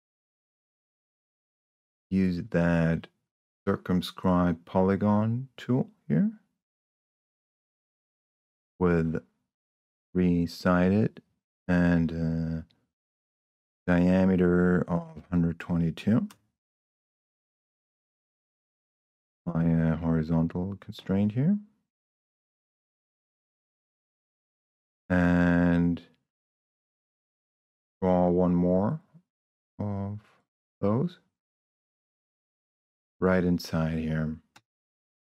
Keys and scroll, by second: 0.0 p, 13.7 1, 15.2 2, 16.2 Return, 18.0 Escape, 18.9 h, 23.1 Escape, 35.0 Escape.